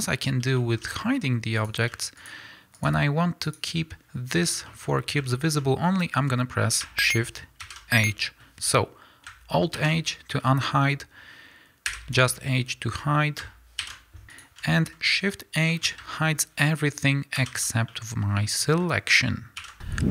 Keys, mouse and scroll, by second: 0.9-1.7 middle drag, 1.7 click, 2.3 shift+click, 4.7-14.2 shift+middle drag, 5.0 scroll up 2, 5.9-7.6 scroll down 2, 7.6 shift+h, 9.8 alt+h, 11.9 h, 13.8 alt+h, 14.2 shift+click, 14.8-20.1 middle drag, 15.3-15.7 scroll down 2, 17.4 shift+h, 19.6 alt+h.